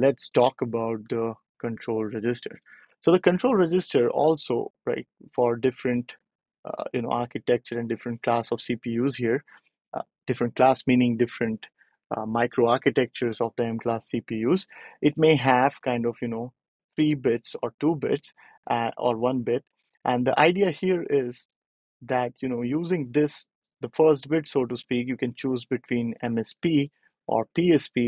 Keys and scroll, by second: 2.4 ctrl+alt+super+p.